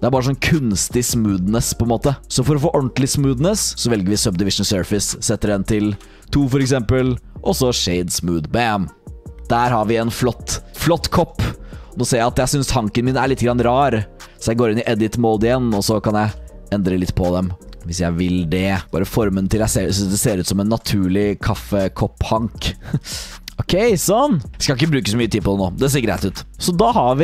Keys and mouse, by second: 2.8-4.5 drag, 5.3-6.4 drag, 7.5-8.7 drag, 9.4-9.7 drag, 10.1 click, 11.0 alt+click, 11.5 alt+click, 13.0 Tab, 13.4 shift+click, 16.2-19.5 typing, 20.9 g, 22.5 r, 23.0 g, 23.3 Tab, 23.6-24.2 drag, 24.3 drag, 26.5-27.2 middle drag.